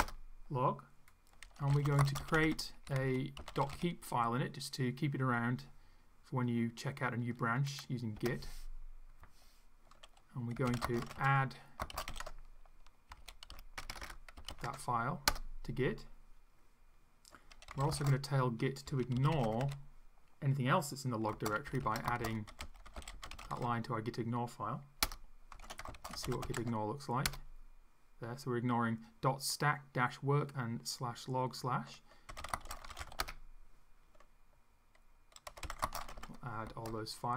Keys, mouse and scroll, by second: 0.1 Return, 1.4-4.3 typing, 8.2 Return, 10.3-15.0 typing, 15.3 Return, 17.5-20.1 typing, 21.3-24.1 typing, 25.0 Return, 25.3-27.0 typing, 27.3 Return, 32.1-33.7 typing, 35.2-36.7 typing.